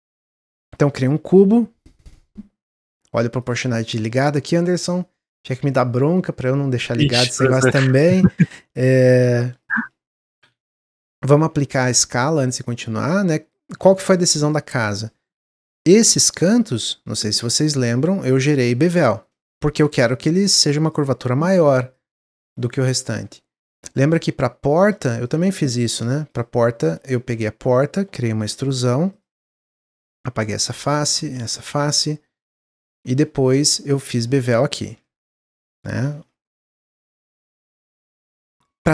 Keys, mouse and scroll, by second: 0.6 3, 0.7 click, 1.4 s, 3.4 click, 7.4 shift+middle click, 8.1 Tab, 8.4 middle click, 9.1 g, 10.1 shift+middle click, 10.4 Tab, 10.6 middle click, 11.4 Tab, 12.0-13.7 drag, 13.7 Tab, 13.9-15.4 middle drag, 15.4 2, 15.8 click, 16.6 shift+click, 17.3 shift+click, 17.6-18.7 middle drag, 18.7 shift+click, 19.0 shift+middle click, 19.8 ctrl+b, 21.9-23.4 drag, 23.4 middle click, 23.8 ctrl+r, 25.1 ctrl+r, 26.2 ctrl+r, 27.3 3, 27.6 click, 28.4 e, 29.3 middle click, 29.9 click, 30.3 x, 31.0 click, 31.2 x, 31.9 middle click, 32.6 scroll up 1, 32.9-34.0 middle drag, 34.0 2, 34.2 click, 34.5 middle click, 35.2 shift+click, 36.0 ctrl+b, 37.7-38.9 middle drag.